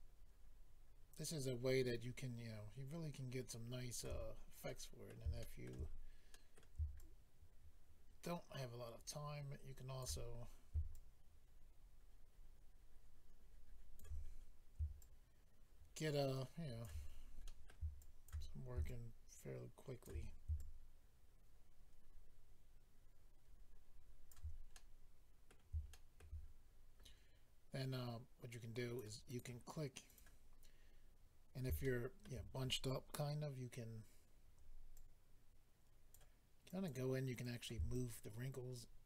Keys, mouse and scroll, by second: 4.2-4.7 scroll down 3, 4.7 middle click, 5.4 shift+middle click, 5.6 middle click, 5.9-6.4 scroll up 4, 6.3 middle click, 7.0 shift+click, 7.7 middle click, 10.4-10.9 scroll up 2, 10.9 shift+click, 14.2-15.0 scroll down 1, 15.0 shift+click, 15.0-15.6 scroll down 2, 17.0-17.6 scroll down 3, 17.4 middle click, 18.0 shift+click, 18.8 shift+click, 20.5 shift+click, 24.7 middle click, 25.9 shift+middle click, 26.1 middle click, 28.5 click, 29.3 click, 29.4 click, 30.1 click, 30.2 click, 30.8-31.4 scroll up 1, 31.8 shift+middle click, 34.2 scroll up 2, 34.9 click, 36.7 click, 37.4 click, 37.9 shift+click.